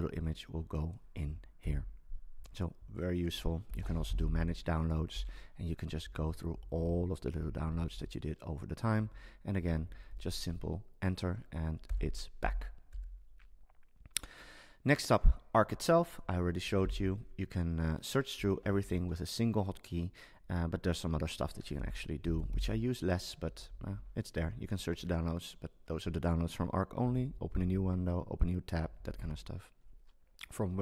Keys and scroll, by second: 1.6 BackSpace, 3.8 super+space, 4.9 Down, 7.3 Up, 9.1 Down, 10.3 Down, 16.8 super+t, 18.4 Down, 21.7 super+space, 23.4 Down, 27.0 Down, 28.9 Up.